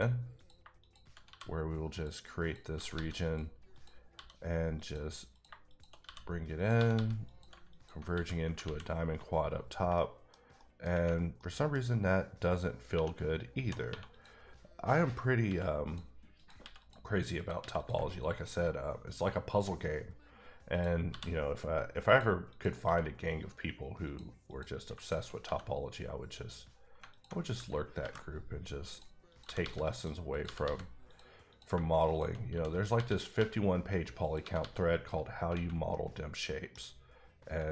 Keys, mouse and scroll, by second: 0.4 click, 0.6 shift+click, 1.2 click, 1.3 f, 1.9 click, 2.4 click, 2.7 g, 2.9 g, 3.2 click, 3.7 click, 4.1 f, 4.7 click, 5.3 click, 5.7 shift+click, 6.0 f, 6.6 click, 6.7 g, 6.9 g, 7.2 click, 8.1 f, 8.6 alt+a, 9.6 scroll down 1, 9.9 middle click, 10.6 middle click, 11.0-11.4 scroll up 2, 11.4 middle click, 12.9-13.9 typing, 14.1 click, 15.4 x, 15.8 click, 16.4 click, 16.6 x, 16.8 click, 17.4 click, 17.6 x, 17.7 click, 20.7 click, 21.1 f, 22.0 click, 22.5 click, 22.8 f, 24.0 click, 24.5 click, 25.0 shift+click, 25.4 f, 27.1 alt+click, 28.0 ctrl+b, 28.9 click, 29.3 click, 29.4 g, 29.6 g, 29.9 click, 30.3 click, 30.4 g, 30.6 g, 31.1 click, 31.5 click, 31.7 shift+click, 32.4 click, 32.5 f, 32.9 f, 33.4 f, 34.4 g, 34.6 g, 34.9 click, 35.5 alt+a, 35.9 middle click, 37.6 click.